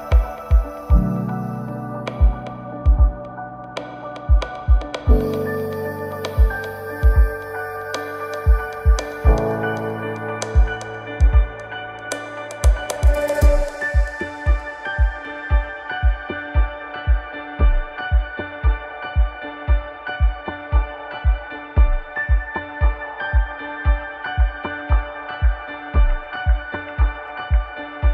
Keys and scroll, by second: 1.9 ctrl+z, 22.7 ctrl+j, 24.7 Return, 24.9 ctrl+t, 27.4 ctrl+t.